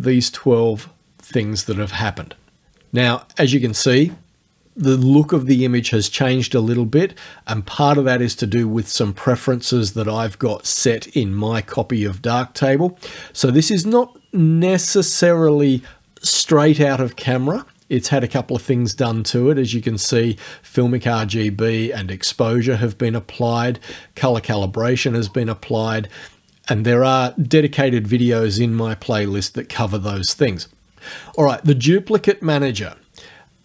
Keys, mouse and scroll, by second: 31.4 click.